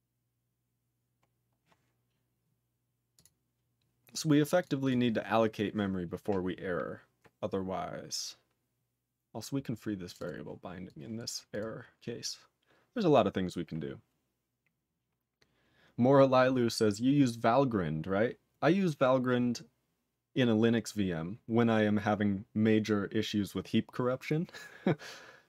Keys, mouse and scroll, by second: 1.2 scroll up 2, 3.1 click, 3.2 click, 4.0 scroll down 2, 4.6 click, 4.6 click, 4.8 click, 4.9 click, 10.0 click, 10.1 click, 10.2 double click, 10.2 double click, 10.8 click, 11.2 click, 11.5 click, 11.6 click.